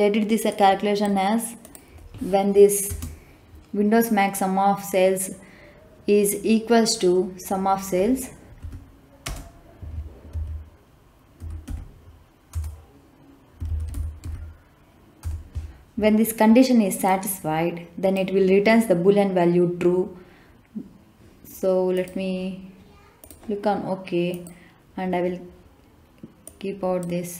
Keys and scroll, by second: 2.8 space, 8.5 =, 9.1 space, 10.2 s, 11.3 u, 11.6 m, 12.4 Return, 13.3-14.6 typing, 15.1 Return.